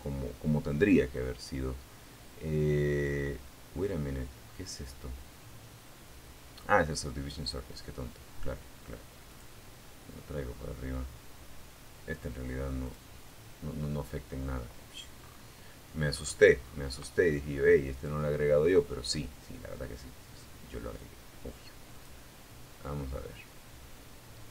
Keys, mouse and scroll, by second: 7.5 click, 11.0 click, 13.4-13.9 scroll up 1, 14.4-14.7 scroll up 1, 14.8 scroll down 1, 15.6-15.9 scroll down 1, 16.8-17.1 scroll down 1, 20.1 click, 23.2 click, 24.2 KP_0, 24.4 Tab.